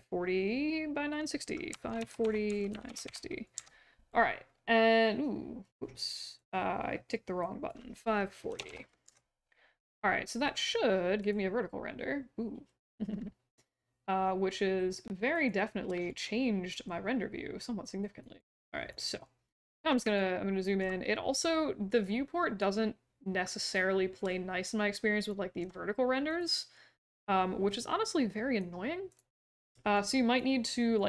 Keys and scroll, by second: 1.4-3.5 typing, 8.2-9.1 typing.